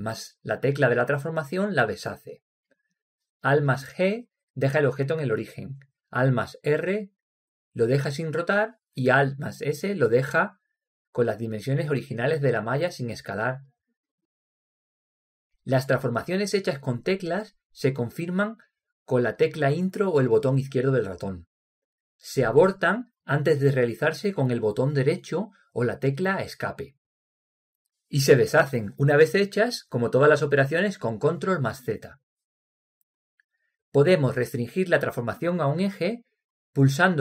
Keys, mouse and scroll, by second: 4.5 alt+g, 7.1 alt+r, 9.7 alt+s, 14.4-16.3 drag.